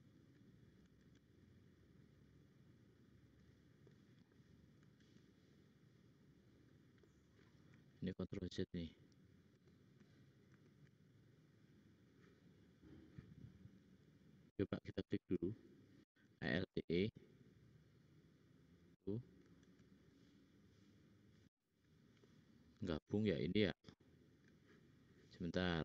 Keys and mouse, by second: 0.8 alt+e, 5.0 alt+e, 8.4 ctrl+z, 9.0 ctrl+z, 9.8 ctrl+z, 10.2 ctrl+z, 10.6 ctrl+z, 14.4 middle click, 14.8 click, 16.1 alt+e, 19.5 alt+e, 22.2 click, 23.9 middle click, 25.7 ctrl+z.